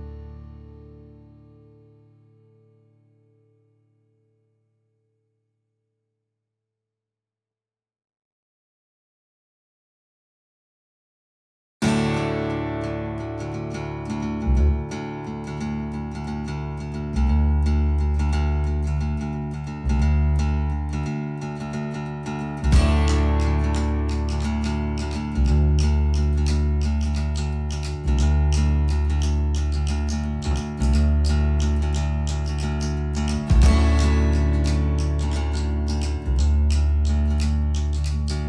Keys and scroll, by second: 1.5 space, 2.9 space, 3.7 e, 6.5 space, 7.6 Escape, 7.7 Escape, 7.9 Escape, 16.0 t, 19.7 Escape, 24.1 Escape, 24.4 space, 27.5 t, 31.3 Escape, 32.6 Escape.